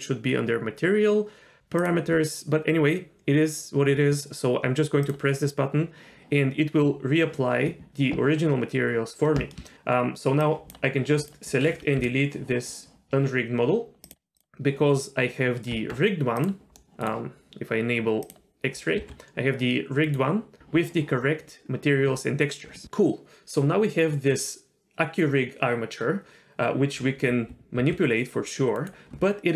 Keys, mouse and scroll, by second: 1.8 click, 5.0 drag, 9.7 shift+middle click, 10.4 drag, 12.0 Delete, 14.0 click, 14.3 click, 15.7 Tab, 16.4 click, 16.8 middle click, 16.8 r, 18.2 click, 19.1 r, 27.8 r.